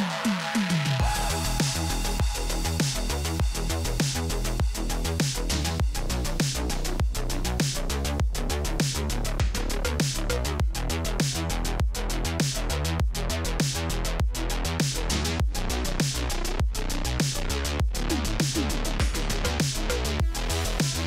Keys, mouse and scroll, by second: 0.0 Tab, 1.0-3.5 typing, 4.8 click, 7.0-7.8 typing, 7.6 click, 8.2 click, 9.2-11.4 typing, 11.7 Return, 13.4-15.9 typing, 13.6 alt+click, 17.7 click, 17.7 ctrl+c, 18.4 click.